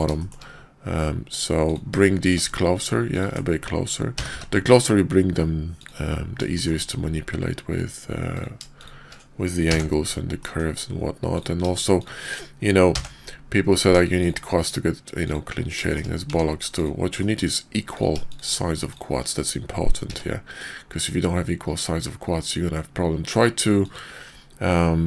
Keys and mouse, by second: 0.1 shift+click, 1.6 click, 4.1 g, 6.5 shift+click, 8.3 click, 8.8 shift+click, 9.6 j, 10.4 click, 11.2 click, 11.9 shift+click, 12.9 j, 13.8 Tab, 14.1 click, 14.6-15.2 drag, 15.8 shift+drag, 16.3 Tab, 16.7 click, 17.1 middle click, 17.8 click, 18.2 shift+click, 18.8 shift+click, 20.0 q.